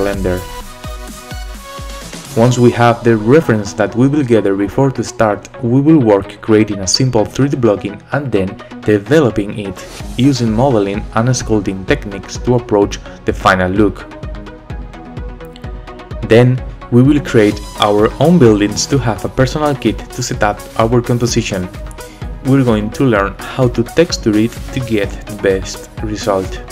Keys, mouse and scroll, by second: 6.9 s, 7.1 g, 8.4 click, 8.4-9.2 scroll down 2, 9.2 scroll up 2, 9.6 shift+d, 10.0 click, 10.4 scroll up 1, 10.5 click, 10.6 right click, 11.0 shift+d, 11.5 middle click, 12.2 scroll up 1, 12.4 g, 13.0 s, 13.1 g, 13.8 click.